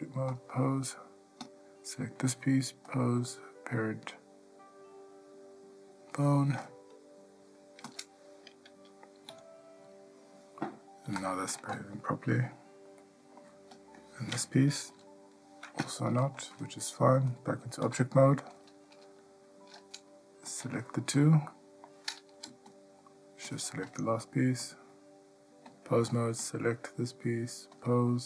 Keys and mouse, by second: 3.1-6.8 drag, 13.2-13.6 ctrl+middle drag, 13.9 click, 15.1 g, 17.5-18.8 drag, 21.7-22.0 middle drag, 22.9 shift+click, 23.7 shift+click, 24.8-25.9 drag, 28.0-28.2 drag.